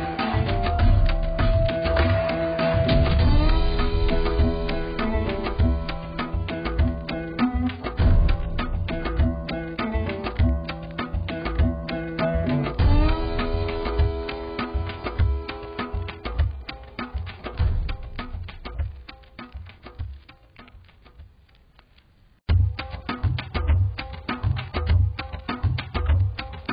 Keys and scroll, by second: 4.5 ctrl+z, 21.6 ctrl+alt+shift+e.